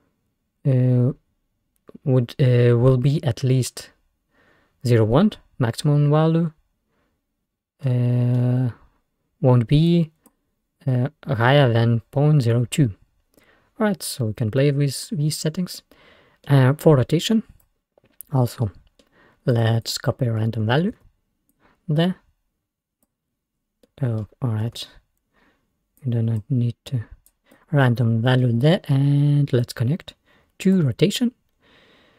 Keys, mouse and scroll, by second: 7.9-9.9 middle drag, 9.9-13.1 drag, 13.1-13.4 scroll down 1, 13.4-13.8 scroll up 2, 15.8 middle click, 16.5 scroll up 1, 17.2 scroll down 3, 17.3-18.7 drag, 18.7-19.6 middle drag, 19.6 click, 20.8 ctrl+c, 21.0 ctrl+v, 21.6-23.7 drag, 23.7 scroll down 3, 23.9-24.8 middle drag, 24.8 ctrl+z, 25.4 scroll down 2, 26.0-28.4 drag, 28.4 scroll down 2, 28.4-29.7 middle drag, 29.7 drag.